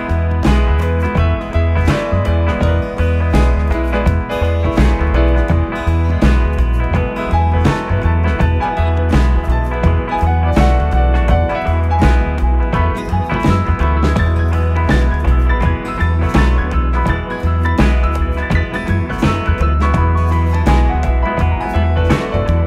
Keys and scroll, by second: 11.5 i, 14.9 v.